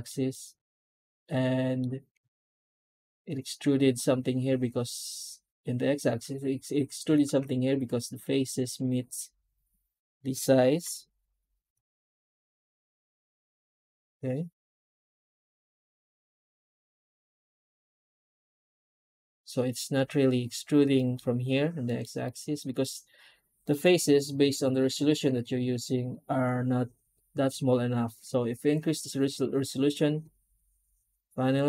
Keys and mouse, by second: 0.2 shift+middle click, 1.2-1.7 middle drag, 2.4-2.8 shift+middle drag, 10.7 F9, 20.8 middle drag, 21.7 middle click, 22.1-22.7 shift+middle drag, 23.5 middle click, 23.9 F9.